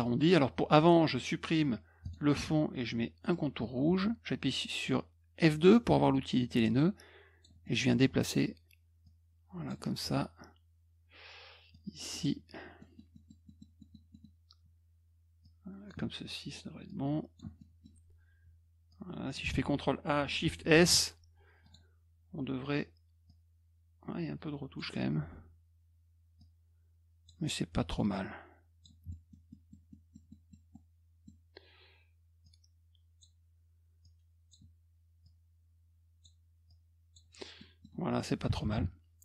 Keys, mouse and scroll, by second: 2.0 click, 3.2 middle click, 3.8 F2, 6.6 click, 7.6 middle click, 9.0 click, 11.7 click, 12.8 middle click, 13.1 middle click, 13.4 middle click, 13.8 middle click, 14.1 middle click, 15.4 click, 16.8 click, 17.5 middle click, 18.9 click, 19.5 ctrl+a, 20.7 shift+s, 21.6 click, 23.2-24.7 drag, 26.3 click, 28.1 click, 29.1 middle click, 29.5 middle click, 29.9 middle click, 30.3 middle click, 30.7 middle click, 32.4 click, 34.0 click, 35.2-36.2 drag, 36.6 click, 37.5 middle click.